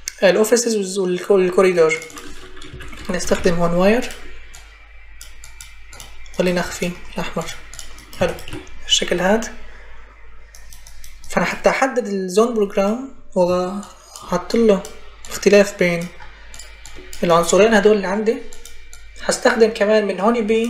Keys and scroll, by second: 2.3-3.7 typing.